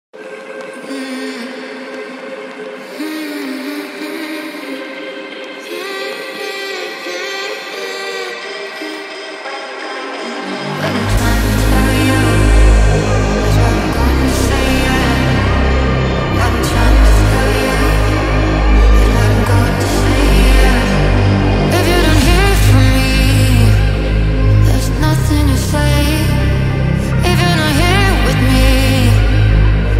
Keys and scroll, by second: 16.7-17.5 typing, 26.0 ctrl+z.